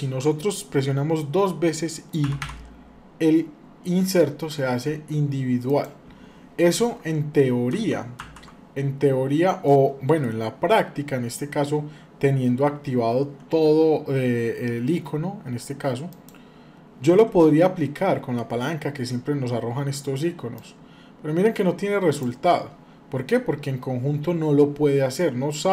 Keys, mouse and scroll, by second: 2.0 i, 7.5 ctrl+z, 8.0 ctrl+z, 9.1 scroll down 1, 9.4 middle click, 15.9 click, 24.9-25.7 middle drag.